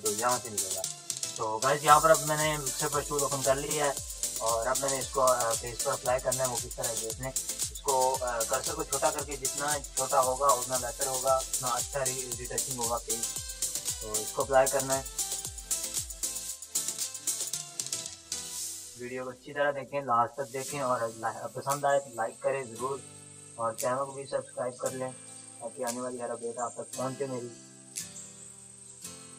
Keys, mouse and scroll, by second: 1.7 right click, 3.0 click, 3.8 ctrl+space, 4.0 click, 4.1 [, 4.6 click, 4.6 [, 4.6-13.1 drag, 13.1-14.0 typing, 13.5 click, 16.2 ], 16.4 ], 16.4 ], 16.5-18.1 drag, 18.1 ], 18.3 ], 18.4 ], 18.6 ], 18.8 click, 21.8 space, 22.0 click, 22.2 [, 22.5-25.3 drag, 25.3 space, 25.4 click, 25.5 [, 25.8 [, 25.9 [, 26.0-28.2 drag, 28.2 ], 28.4 click.